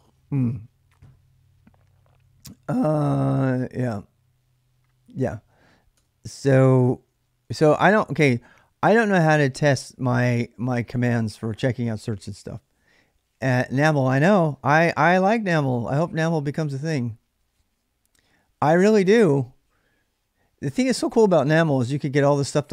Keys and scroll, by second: 6.0-7.4 typing.